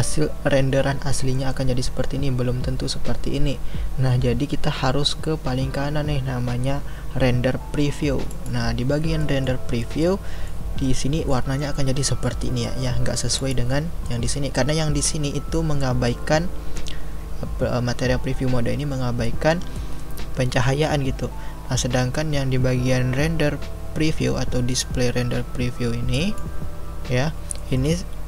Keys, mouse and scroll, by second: 8.3 click, 9.2-13.4 middle drag, 13.4 click, 14.0-26.1 middle drag, 26.1-27.6 drag, 27.6-28.2 middle drag.